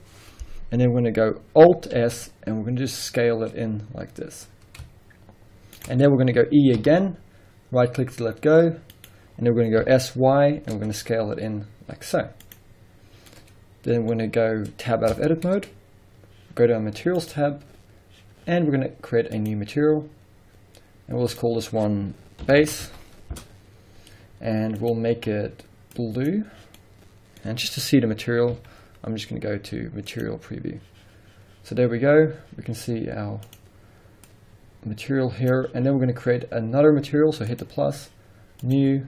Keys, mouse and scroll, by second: 2.0 alt+s, 5.8 shift+click, 6.0-9.0 middle drag, 6.3-6.8 scroll up 2, 6.8 e, 9.0 right click, 9.8 s, 12.5 click, 12.9 scroll down 1, 13.3-17.2 middle drag, 15.1 Tab, 17.2 click, 19.4 click, 21.3-25.0 drag, 23.4 Return, 26.8-33.4 middle drag, 27.7-28.5 scroll up 2, 28.5 z, 31.7-33.4 scroll down 2, 33.4 click, 37.5 click, 38.6 click.